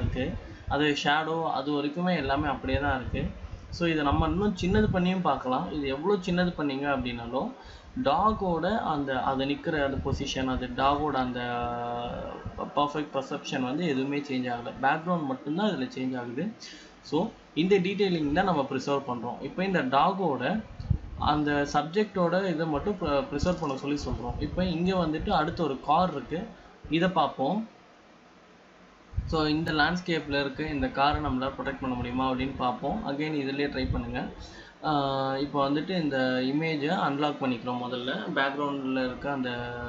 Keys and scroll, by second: 7.9 ctrl+z, 10.9 ctrl+z, 11.6 ctrl+shift+z, 14.1 ctrl+shift+Return, 24.9 ctrl+z.